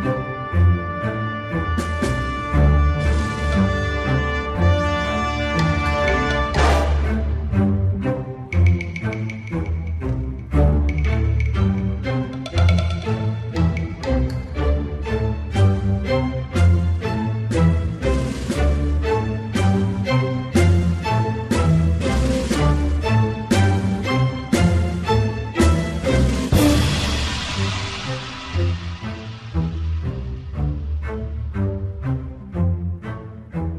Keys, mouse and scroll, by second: 0.0 n, 0.0 alt+click, 0.2 f, 0.3 f, 0.6-2.8 ctrl+drag, 2.8 ctrl+z, 2.9 alt+click, 3.1 alt+right click, 3.2 alt+click, 3.4 m, 3.6 alt+click, 3.7 f, 3.9 click, 4.5 alt+middle click, 4.8 ctrl+click, 5.3 alt+middle click, 5.6-6.7 ctrl+alt+drag, 6.7 alt+middle click, 6.9-8.2 drag, 8.2 f, 8.4 click, 8.7 f, 8.9-12.2 drag, 12.2 alt+middle click, 12.4 alt+click, 12.7 alt+right click, 12.9 alt+click, 13.2 alt+middle click, 13.4 alt+right click, 13.5 alt+middle click, 13.8 shift+c, 13.9 alt+click, 14.0 f, 14.7-15.7 ctrl+drag, 16.2 alt+click, 16.5 alt+middle click, 16.7 alt+right click, 16.8 alt+click, 16.9 alt+middle click, 17.2 m, 17.5-18.5 drag, 18.7 alt+click, 19.2 alt+middle click, 19.5 alt+click, 20.1 alt+middle click, 20.3 click, 20.7 alt+middle click, 21.0 click, 21.6 alt+middle click, 21.9-23.4 drag, 23.4 alt+middle click, 23.7-28.7 drag, 28.7 alt+middle click, 29.0 alt+click, 29.1 alt+right click, 29.2 alt+middle click, 29.4 alt+click, 29.5 alt+right click, 29.6 alt+middle click, 29.7 alt+click, 29.8 shift+c, 29.9 alt+right click, 30.2 m, 30.4 ctrl+click, 30.8 shift+c, 31.0 alt+click, 31.2 alt+right click, 31.3 alt+middle click, 31.7-32.9 ctrl+drag, 32.9 alt+middle click, 33.0 alt+click, 33.2 alt+middle click, 33.3 alt+click, 33.5 alt+middle click, 33.6-33.7 ctrl+alt+drag.